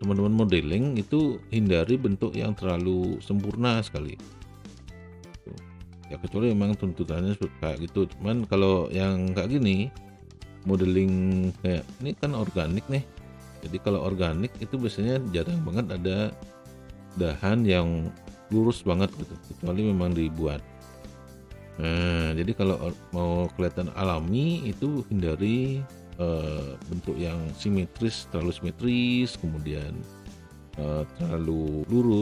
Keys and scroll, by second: 28.7 e.